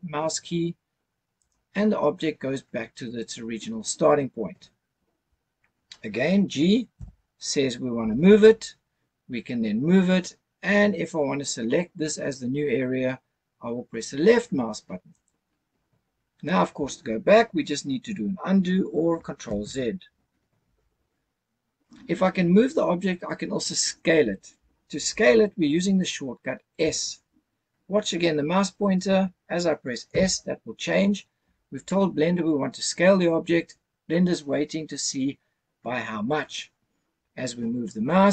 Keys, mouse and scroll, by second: 1.4 right click, 6.9 g, 15.1 click, 19.5 ctrl+z, 30.1 s.